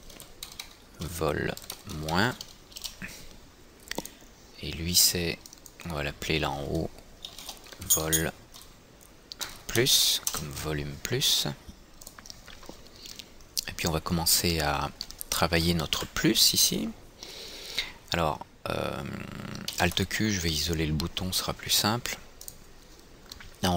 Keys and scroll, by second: 2.9 Return, 10.6 Return, 16.2 F4, 20.3 alt+q.